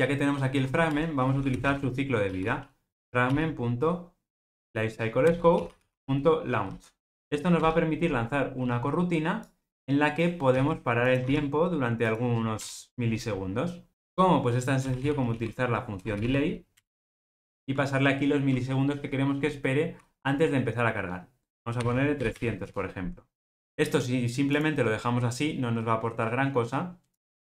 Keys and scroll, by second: 2.9 Return, 5.2 Return, 16.7 super+z, 24.5 ctrl+r.